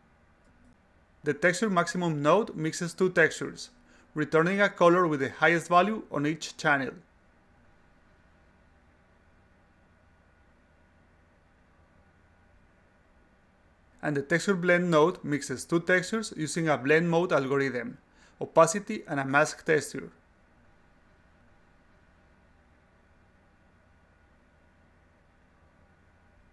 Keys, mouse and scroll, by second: 2.4 click, 5.8 click, 7.0 click, 8.0 click, 9.4 click, 10.0 click, 10.4 d, 11.4 click, 12.3 click, 15.1-16.4 drag, 18.6 click, 19.8 click, 21.4 click, 24.0 click, 24.7 click, 25.9 click, 26.3 click.